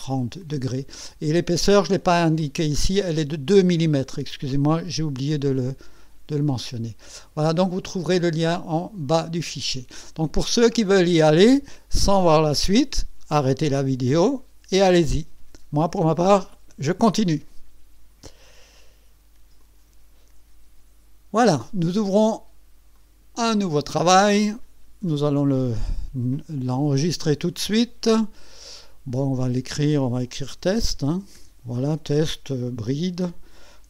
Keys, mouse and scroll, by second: 6.9-7.8 scroll down 3, 7.8 scroll up 1, 8.1-9.9 drag, 10.0 click, 19.6 click, 20.0 click, 22.9 click, 26.7 ctrl+s, 28.5 click, 29.7 click, 30.4-31.9 typing.